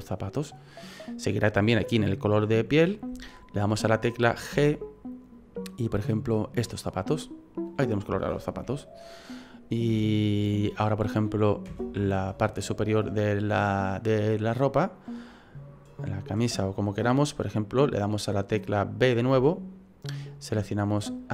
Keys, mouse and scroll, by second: 4.5 g, 7.2 middle click, 7.7 right click, 8.1 shift+middle click, 8.8-9.7 scroll down 3, 9.3 middle click, 10.0 middle click, 10.5 scroll up 1, 11.7 KP_1, 19.3 b.